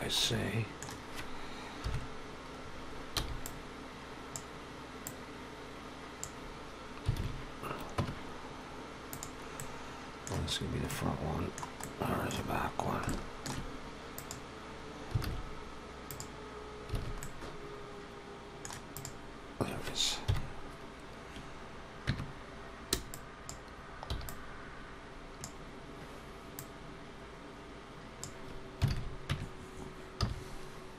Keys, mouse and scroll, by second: 0.1 middle click, 1.7 KP_1, 2.4-3.3 scroll up 3, 3.0 b, 4.9 click, 7.0 alt+a, 7.8 Tab, 9.0 click, 9.4 middle click, 10.7 middle click, 11.6 middle click, 12.3-12.9 scroll down 4, 12.9 shift+middle click, 13.0 shift+middle click, 14.0 click, 15.1 alt+a, 15.9 click, 16.8 alt+a, 17.0 middle click, 18.7 click, 20.1 KP_1, 21.9 Tab, 22.8 click, 23.9 b, 26.4 click, 28.7 alt+a, 29.1 Tab, 30.1 z.